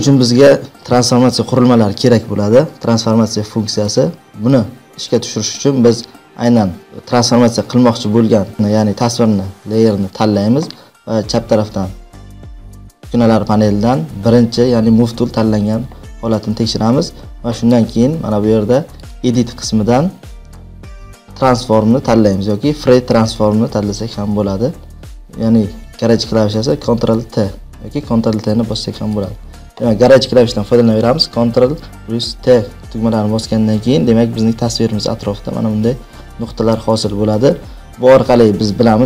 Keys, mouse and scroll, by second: 0.1 click, 4.4 click, 6.1 click, 19.0 click, 29.2 click, 31.5 ctrl+t.